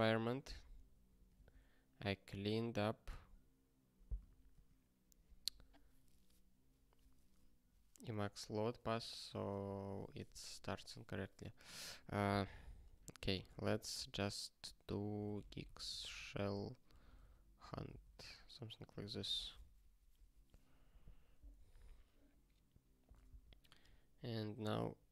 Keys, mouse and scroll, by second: 4.5 super+w.